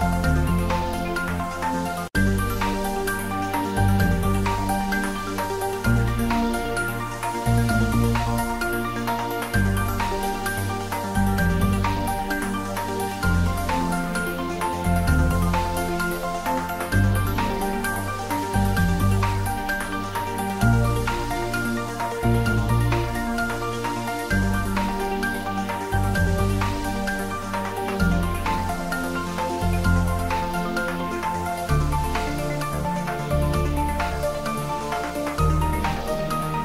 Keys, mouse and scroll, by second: 0.0 ctrl+s, 0.7 click, 4.8 click, 8.3 click, 8.6 Tab, 9.1 click, 9.7 3, 10.0 click, 11.2 shift+click, 12.5 shift+click, 14.2 click, 15.8 click, 16.7 ctrl+middle click, 17.4-19.1 typing, 17.7 click, 19.0 click, 22.7-24.5 ctrl+middle drag, 24.8 click, 25.5 ctrl+middle click, 26.1 click, 27.7 click, 29.0 ctrl+middle click, 30.1 a, 30.8 g, 35.3 click.